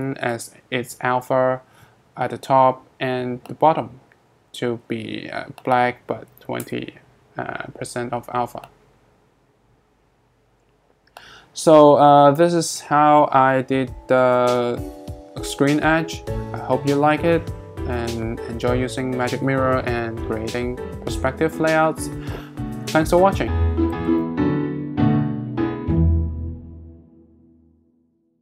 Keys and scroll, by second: 0.0-0.1 typing, 0.3 Return, 5.9-6.8 typing.